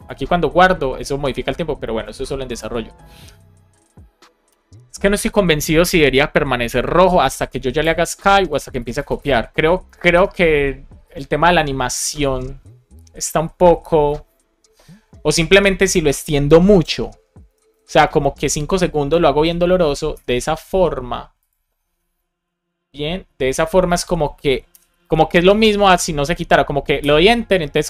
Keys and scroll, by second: 4.4 Return, 7.8 Escape, 9.8 shift+super+Left, 10.0 BackSpace, 17.4 BackSpace, 18.0 Down, 19.6 Left, 20.1 BackSpace, 20.6 super+s, 24.7 Return, 27.0 Return.